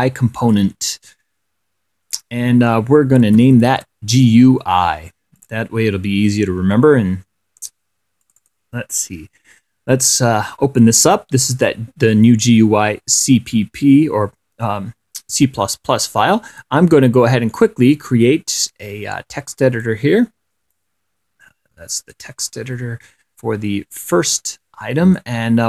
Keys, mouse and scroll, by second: 0.7 click, 3.4-4.5 typing, 5.7 click, 8.5 click, 11.8 click, 17.8-20.3 right drag, 21.0-22.6 drag, 24.4-25.6 drag.